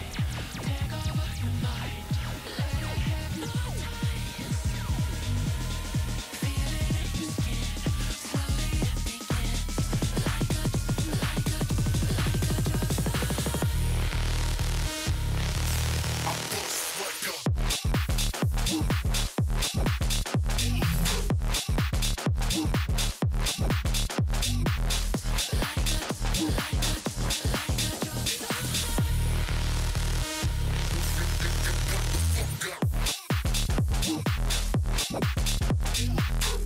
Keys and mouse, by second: 2.2 click, 2.9 click, 4.2 click, 6.5 click, 9.5 click, 10.6 click, 13.6 click, 15.6 click, 18.2 click, 23.6 click, 24.5 alt+click, 25.1 click, 26.1 click, 26.3 alt+shift+click, 26.9 click, 27.6 ctrl+], 28.2 Return, 28.7 ctrl+], 29.3 click, 29.8 shift+click, 31.4 click, 32.0 space, 32.7 click, 34.2 click, 34.8 space, 34.8 click, 35.5 click, 36.5 click.